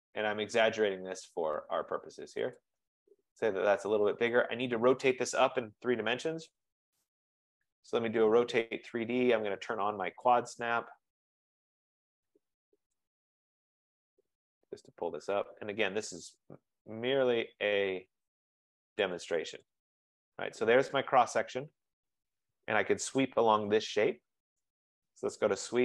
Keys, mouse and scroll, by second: 2.7 click, 3.5 scroll, 4.4 click, 6.1-8.6 typing, 10.5 click, 13.2 click, 14.2 click, 17.3 shift+click, 19.4 click, 19.8 click, 21.4 right click, 21.6-22.0 scroll, 22.9 scroll, 24.7 right click, 25.2-25.8 typing.